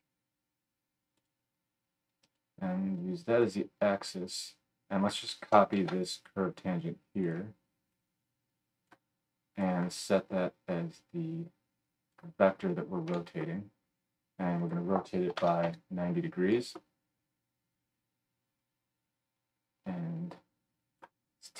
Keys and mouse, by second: 1.2-2.3 drag, 5.1-7.9 drag, 5.8 shift+d.